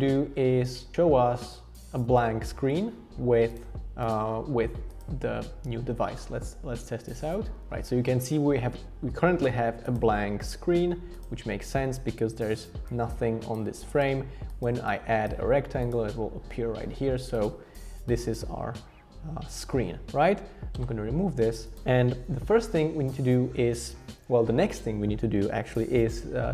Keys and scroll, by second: 20.8 BackSpace.